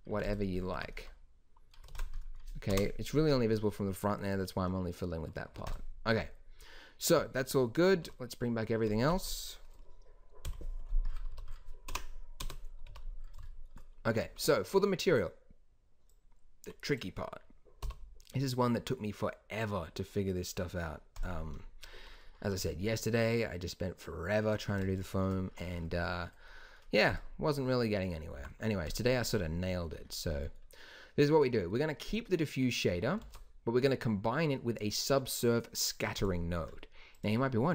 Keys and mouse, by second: 0.5-0.9 drag, 0.7 Tab, 1.0 click, 1.8 ctrl+s, 2.6 KP_0, 5.5 ctrl+s, 7.9 alt+h, 10.4 KP_Divide, 11.2 z, 11.8 KP_Decimal, 12.3 KP_0, 12.8 z, 17.7 n, 21.1-25.3 drag, 28.3 g, 33.2 shift+a.